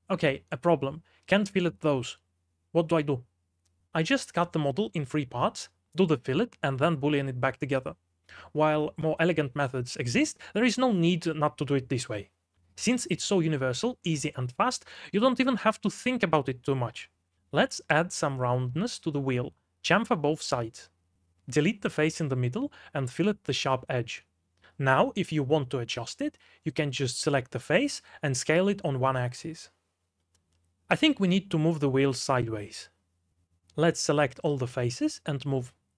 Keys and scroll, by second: 0.0-4.6 typing, 1.0 Escape, 7.4 shift+w, 8.0 2, 8.3 d, 9.4-12.9 typing, 18.6 shift+z, 18.9 shift+w, 20.4 2, 22.0 c, 23.6 3, 23.9 x, 24.3 ctrl+z, 24.5 x, 24.9 2, 25.8 Escape, 26.2 d, 27.9 3, 28.5 x, 29.1 s, 30.4 Escape, 30.6 s, 32.9 shift+w, 33.3 2, 33.8 d, 34.1 3.